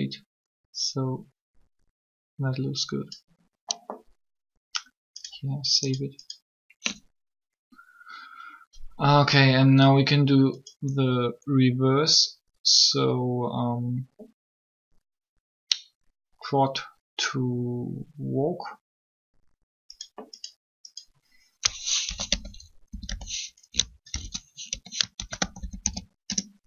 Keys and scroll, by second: 21.9-22.9 typing, 24.1 shift+-, 24.7 2, 25.1 shift+w, 25.5 a, 26.2 Return.